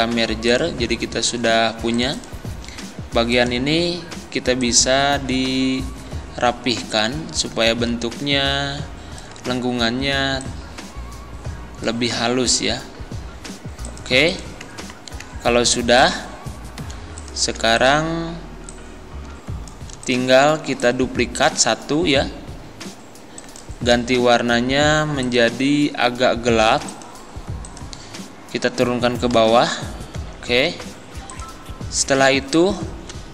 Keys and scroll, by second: 29.3 ctrl+Page_Down.